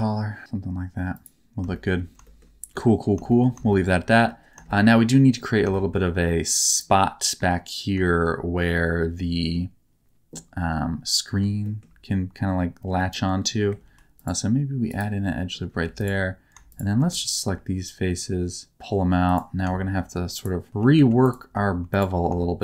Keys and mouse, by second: 1.1 click, 1.7 shift+middle click, 2.2 shift+middle click, 2.7 middle click, 3.2 shift+middle click, 3.7 shift+middle click, 4.1 middle click, 4.6 shift+middle click, 4.9 middle click, 5.7 shift+middle click, 6.7 click, 7.0 middle click, 8.0 shift+middle click, 11.6 shift+middle click, 12.9 middle click, 13.8 ctrl+r, 15.2 middle click, 15.8 3, 16.0 click, 16.6 shift+click, 16.9 middle click, 17.4 e, 20.3 click, 20.9 2, 21.2 click, 21.8 click.